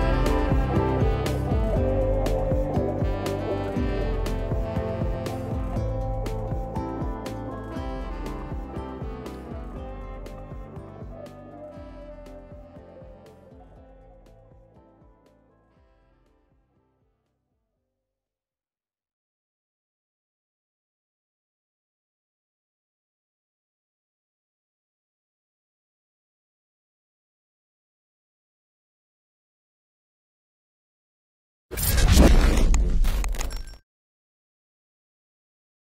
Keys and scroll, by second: 1.5 t, 3.6-4.5 typing, 4.6 Return, 6.6 space, 15.4 space, 17.6-18.5 typing, 20.0 space.